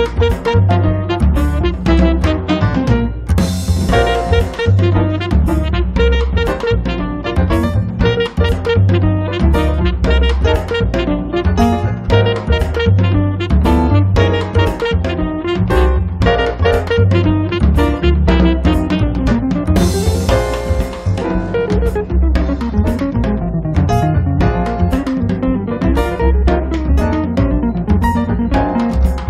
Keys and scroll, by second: 6.5 space.